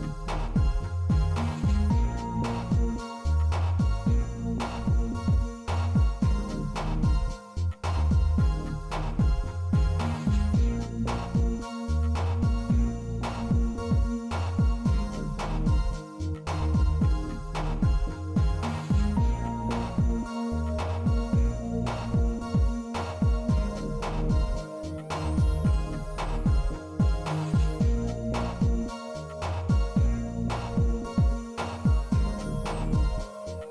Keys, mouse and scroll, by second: 0.1 shift+e, 0.2 shift+middle click, 1.2 e, 3.7 z, 5.3 middle click, 6.2 Tab, 9.3-11.2 drag, 14.0 Tab, 15.3 ctrl+r, 17.6 ctrl+r, 18.6 middle click, 19.7 ctrl+r, 22.2 Tab, 22.9 click, 23.2 middle click, 23.4 shift+drag, 24.1 middle drag, 24.9-26.2 right drag, 28.2 click, 29.6-30.8 right drag, 32.5 right click.